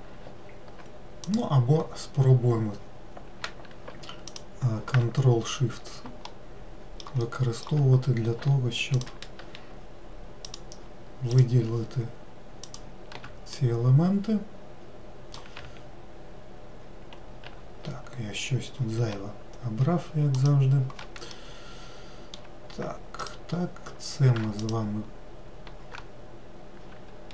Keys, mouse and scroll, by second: 1.1 click, 4.3 ctrl+shift+click, 6.2 alt+middle click, 7.2 alt+middle click, 8.8 shift+click, 10.3 ctrl+shift+click, 11.2 ctrl+shift+click, 12.6 ctrl+shift+click, 13.4-16.6 middle drag, 20.3 shift+click, 21.2-23.1 middle drag, 23.1 shift+click, 24.5 ctrl+click.